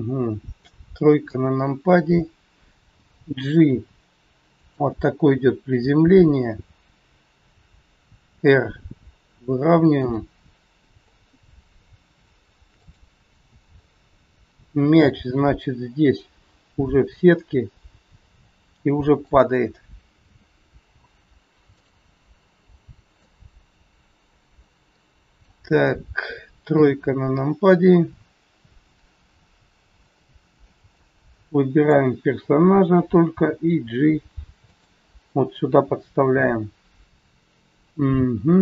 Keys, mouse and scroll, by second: 1.2 KP_3, 1.7-3.1 scroll down 2, 3.1 g, 9.9 r, 10.4 scroll up 2, 12.7 click, 12.7 scroll up 4, 13.7 scroll down 3, 15.3 g, 20.2 a, 20.8 i, 23.1 middle click, 27.1 KP_3, 30.2 scroll down 3, 31.0 click, 33.2 g, 37.5-37.8 scroll up 3.